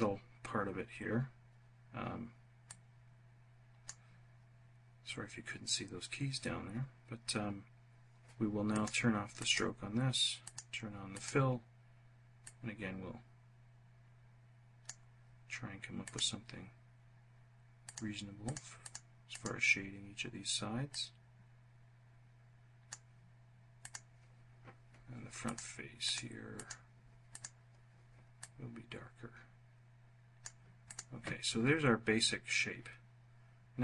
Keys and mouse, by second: 8.5 click, 9.1 click, 10.2 click, 10.8 click, 12.1-14.7 drag, 15.7 click, 17.5 click, 18.1 click, 18.5 click, 19.0 click, 20.6-22.7 drag, 23.5 click, 25.1 click, 25.7 click, 26.2 click, 27.0 click, 28.1-30.2 drag, 30.5 click.